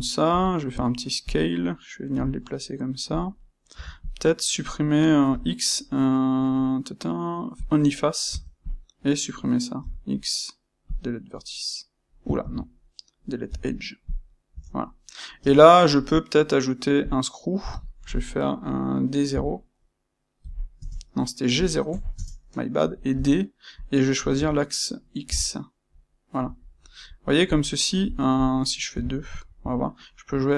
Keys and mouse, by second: 1.3 click, 3.1 click, 3.7 Tab, 3.9 click, 8.6 click, 9.7 >, 11.3-30.5 middle drag, 12.3 ctrl+z, 13.4 >, 15.4 space.